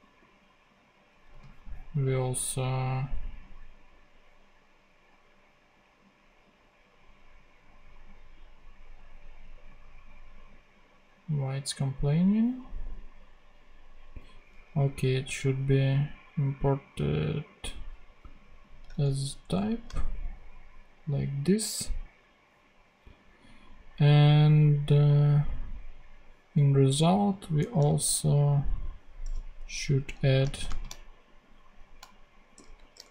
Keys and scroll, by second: 1.2 super+c, 19.2 alt+shift+Down, 27.5 Return, 28.7 super+v, 29.5 Up, 29.9 Left, 30.5 shift+;, 30.6 shift+space, 32.5-33.1 typing.